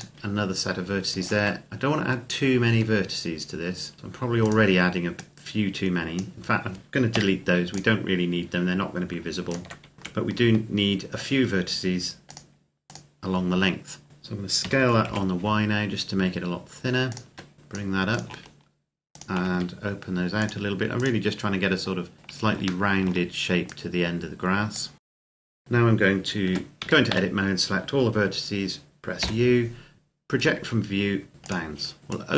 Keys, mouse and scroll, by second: 1.0 alt+right click, 1.8-2.5 scroll up 1, 2.5 s, 4.3 click, 6.9 x, 7.5 click, 9.3 alt+right click, 9.9 s, 10.2 ctrl+r, 10.3-12.1 scroll up 1, 12.1 click, 14.1 Tab, 14.4 s, 14.8 y, 16.9 click, 17.1 Tab, 17.5 click, 17.9 right click, 18.9 shift+right click, 19.3 s, 20.2 click, 20.7 right click, 21.5-22.1 scroll down 1, 22.1-22.7 scroll up 2, 22.7 shift+middle click, 23.4 click, 25.0 scroll up 1, 25.1 click, 25.3 alt+right click, 26.7 a, 26.9 a, 29.0 u, 31.3 click.